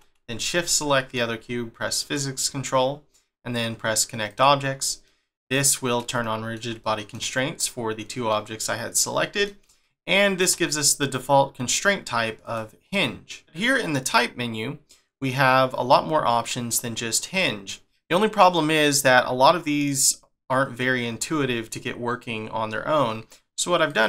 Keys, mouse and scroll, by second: 0.4 shift+click, 0.8 middle click, 2.0 click, 4.3 click, 5.0 middle click, 8.3 middle click, 9.8 shift+middle click, 12.4 click, 14.0 click, 23.9 click.